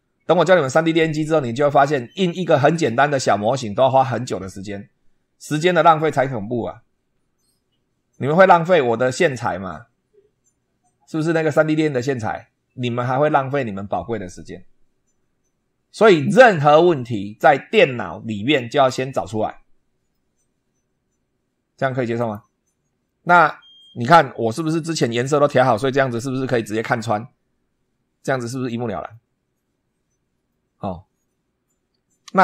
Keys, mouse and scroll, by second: 22.0 click, 23.1 click, 24.0 scroll up 2.